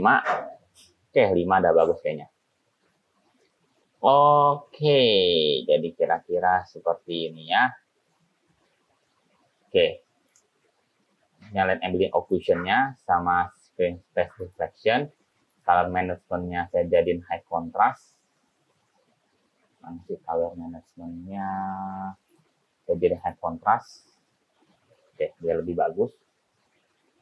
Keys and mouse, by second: 10.4 click, 12.4 click, 14.6 click, 15.7 click, 17.0-18.0 drag, 22.5-23.7 drag.